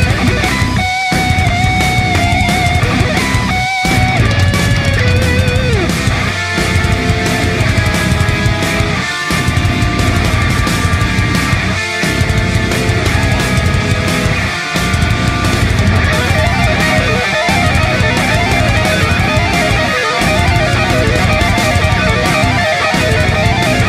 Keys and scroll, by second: 4.4 alt+space, 10.2 space.